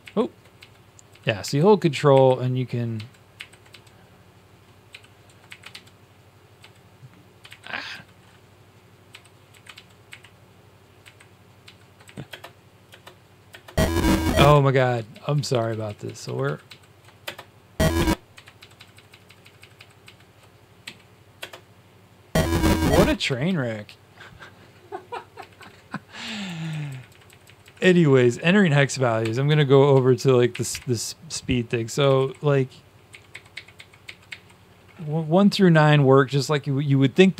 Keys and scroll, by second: 0.0 ctrl+shift+Up, 0.5 ctrl+Down, 1.0 ctrl+Down, 1.4 ctrl+Up, 2.0 ctrl+Up, 3.3 ctrl+Up, 3.6 Down, 4.8-5.6 typing, 5.6 ctrl+Down, 6.5 ctrl+Down, 7.4 ctrl+Up, 7.8 Down, 9.0-9.6 typing, 9.6 ctrl+Down, 10.0 ctrl+Up, 10.9 ctrl+Up, 11.6 ctrl+Down, 12.2 Up, 12.8 Up, 13.5 Up, 14.3 Up, 15.0 ctrl+shift+Down, 15.3 ctrl+shift+Down, 15.4 ctrl+shift+Down, 15.6 ctrl+shift+Down, 18.5 ctrl+shift+Down, 19.0 ctrl+shift+Down, 20.8 Home, 23.4 Down, 25.3 Down, 25.8 Down, 26.6 Up, 27.2 Up, 27.7 Up, 29.1 Tab, 29.4 Tab, 29.8 Down, 30.1 Down, 31.7-34.8 typing.